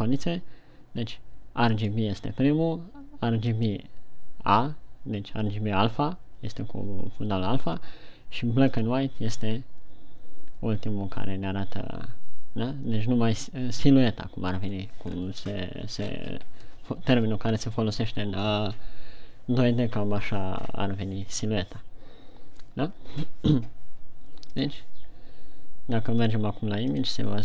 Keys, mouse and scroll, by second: 25.6 click.